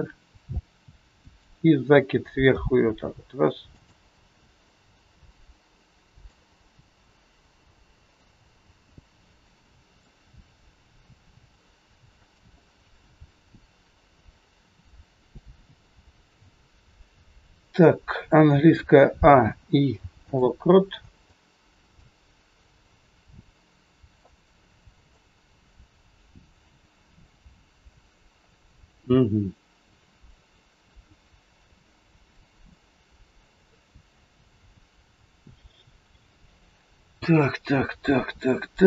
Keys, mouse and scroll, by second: 1.2 r, 3.7 g, 4.2-4.5 scroll down 3, 4.5 middle click, 6.5 scroll up 3, 7.9 click, 8.9 middle click, 10.5 scroll down 2, 11.2 r, 12.6 middle click, 18.7 a, 19.4 i, 20.8 scroll down 1, 21.2 shift+middle click, 25.0 click.